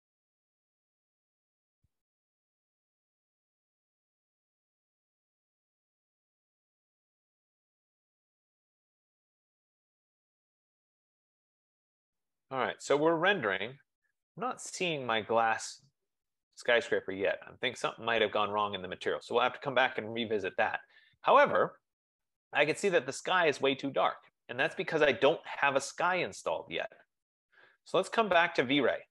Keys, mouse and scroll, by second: 1.6 F15, 25.9-27.9 drag.